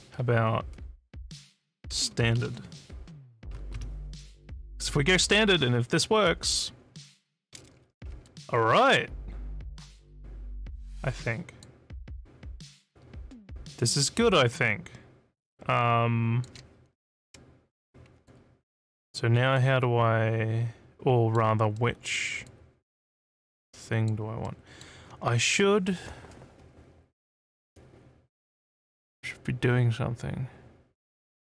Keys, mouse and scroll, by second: 1.7-2.7 typing, 5.2 click, 8.2-11.6 alt+drag, 12.1-16.4 alt+drag, 18.3 alt+click, 19.6-21.3 alt+middle drag, 21.8 alt+middle click, 22.5-24.1 alt+drag, 24.5 alt+middle click.